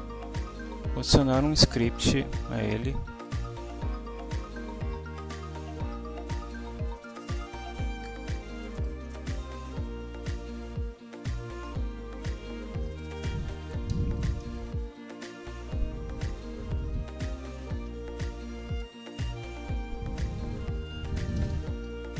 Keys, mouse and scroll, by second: 3.3 click, 6.4 click, 7.3 click, 8.2 click, 9.6 Delete, 10.3 Down, 11.5 Right, 11.9 Up, 12.7 Return, 13.1 Up, 13.4-14.7 typing, 17.3-18.2 typing, 20.2-22.1 typing.